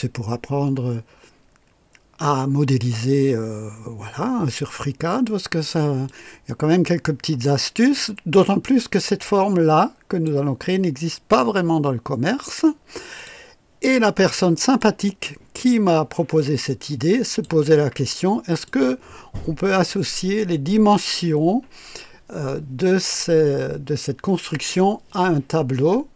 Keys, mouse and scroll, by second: 6.1-10.4 drag, 10.7-13.5 drag, 14.8-17.6 drag, 18.6-20.1 drag.